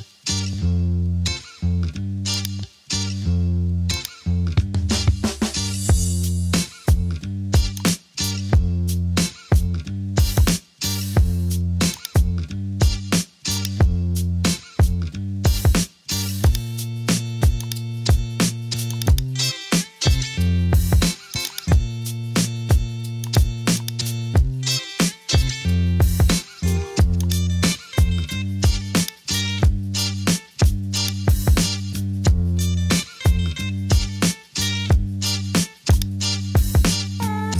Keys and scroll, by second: 5.6 Return, 33.9 Return.